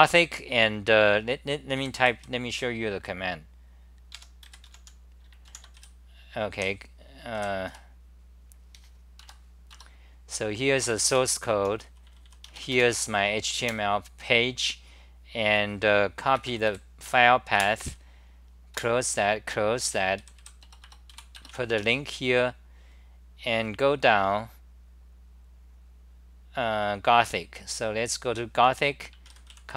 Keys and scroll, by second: 1.8 typing, 4.2 a, 6.6 w, 9.9 Return, 10.7-12.0 typing, 13.6 super+r, 16.7 BackSpace, 17.6 super+w, 20.0-21.6 typing, 21.7 Home.